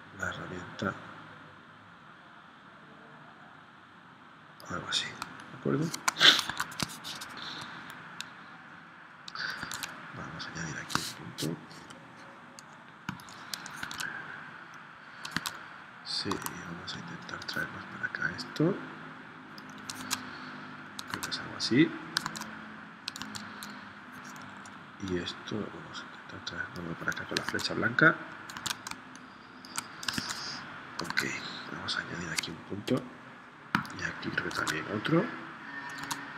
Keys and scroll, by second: 5.2 space, 6.5 super+Tab, 9.6 super+Tab, 11.9 p, 13.9 super+Tab, 15.3 super+Tab, 16.4 a, 20.0 super+Tab, 21.2 super+Tab, 22.3 super+Tab, 23.2 super+Tab, 27.5 super+Tab, 28.7 super+Tab, 28.9 space, 30.2 super+Tab, 31.1 super+Tab, 32.9 p, 34.6 super+Tab, 36.1 super+Tab.